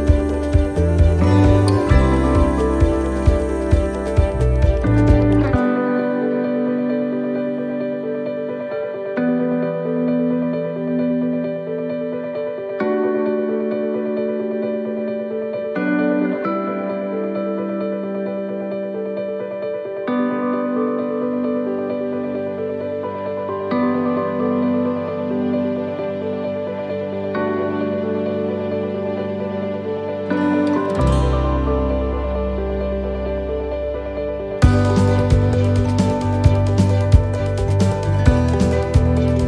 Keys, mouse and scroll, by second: 0.3 middle click, 0.3 shift+d, 1.0 middle click, 2.0 click, 4.0 click, 5.6 middle click, 6.9 click, 8.0 middle click, 9.9 middle click, 10.8 middle click, 11.5-12.1 scroll up 3, 11.9 shift+middle click, 12.7 middle click, 13.7 click, 15.1 middle click, 17.3-17.7 scroll down 2, 17.7 middle click, 18.4-18.8 scroll up 2, 18.8 middle click, 19.7 middle click, 20.3 middle click, 21.5 shift+middle click, 22.0 shift+middle click, 24.3 scroll down 2, 24.7 shift+middle click, 25.8-26.3 scroll up 3, 26.2 shift+middle click, 28.0 middle click, 28.3-28.7 scroll down 2, 28.9 scroll down 3, 29.0 middle click, 30.5 shift+d, 31.9 click, 36.6 click, 36.6 middle click, 37.2-38.0 scroll up 3, 38.0 click, 39.2 middle click.